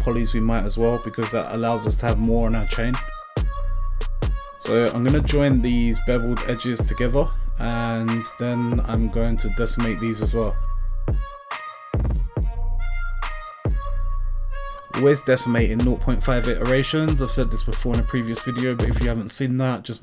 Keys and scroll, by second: 17.9 0, 18.1 ., 18.4 5, 19.0 Return.